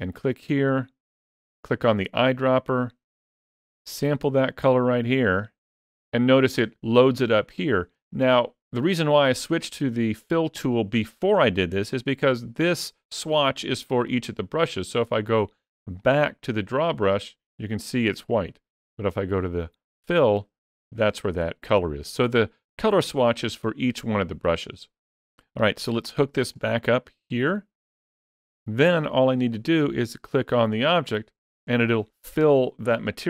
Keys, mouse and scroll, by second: 15.8 click, 19.8 click, 26.3 click.